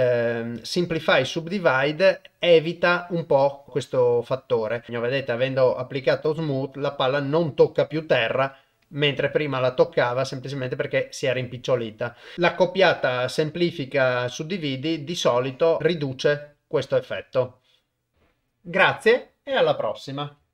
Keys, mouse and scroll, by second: 2.7-4.0 drag, 4.9 shift+space, 6.3-7.3 drag, 11.9 click, 12.3 click, 13.5-14.4 drag, 15.5 click, 16.2-17.2 drag, 17.9 click.